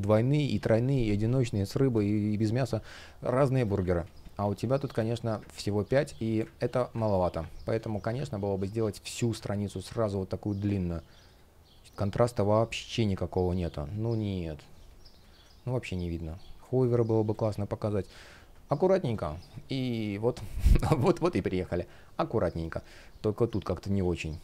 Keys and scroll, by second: 1.6 space, 3.7 super+z, 5.1 super+z, 5.5 space, 7.6 shift+Return, 9.7 super+z, 13.5 super+z, 14.9 space, 18.7 Delete, 19.7 space.